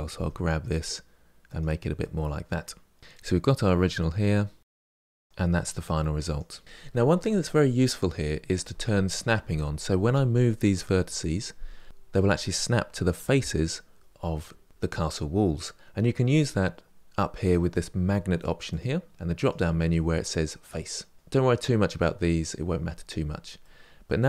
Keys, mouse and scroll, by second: 1.7-3.0 middle drag, 5.3 click, 6.0 click, 18.5 click, 19.5-23.4 drag, 23.4-24.2 middle drag.